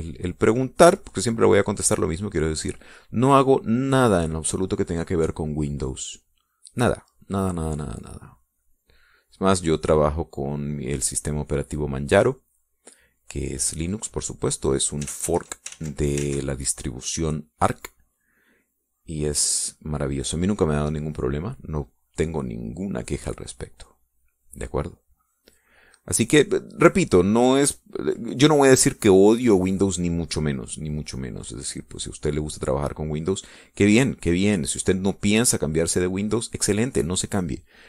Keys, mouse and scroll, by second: 0.8-2.4 drag, 2.8-4.4 drag, 6.0 click, 6.9-8.3 middle drag, 8.3-10.8 drag, 11.7-13.3 drag, 14.9-16.4 drag, 16.4 ctrl+z, 18.4-23.0 drag, 23.6-27.0 drag, 28.6 middle click, 32.6-37.8 drag.